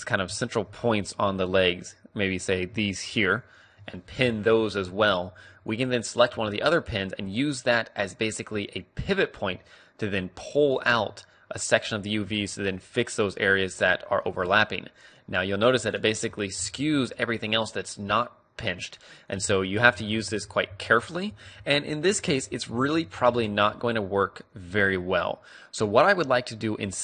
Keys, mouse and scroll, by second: 1.3 a, 2.5-7.5 right drag, 4.3 p, 5.0 a, 6.5 g, 11.0-12.6 drag, 11.0 a, 11.8-13.9 right drag, 12.4 g, 16.9 click, 16.9 g, 17.7 middle click, 19.6 ctrl+z, 19.6-20.8 right drag, 19.7 ctrl+z, 20.0 ctrl+z, 20.1 ctrl+z, 20.4 ctrl+z, 20.7 ctrl+z, 20.8 ctrl+z, 21.2 ctrl+z, 21.7 ctrl+z, 22.0 ctrl+z, 22.2 ctrl+z, 22.4 ctrl+z, 22.6 ctrl+z, 22.8 ctrl+z, 23.0 ctrl+z, 23.3 ctrl+z, 23.5 ctrl+z, 23.8 ctrl+z, 24.7-27.0 middle drag, 24.7 a.